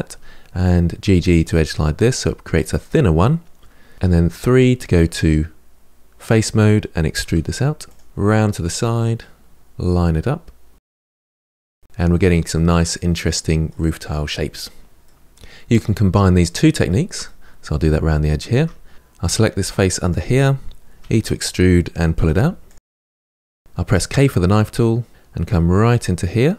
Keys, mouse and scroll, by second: 0.4 click, 0.8 g, 3.8 middle click, 3.9 3, 4.0 middle click, 4.7-5.9 scroll up 3, 6.0 click, 7.0 e, 8.4 KP_Decimal, 8.6 middle click, 9.4 scroll down 3, 9.6 g, 10.3 middle click, 10.8 r, 11.2 Tab, 11.3 scroll down 10, 11.5-14.0 middle drag, 14.8 middle click, 16.6-17.7 shift+middle drag, 17.7-18.3 scroll up 2, 18.3 Tab, 18.9 middle click, 19.3 click, 19.8 3, 20.3 e, 20.7 middle click, 21.0 g, 21.7 middle click, 22.3-22.8 scroll up 1, 22.8 middle click, 23.2 r, 23.6 k.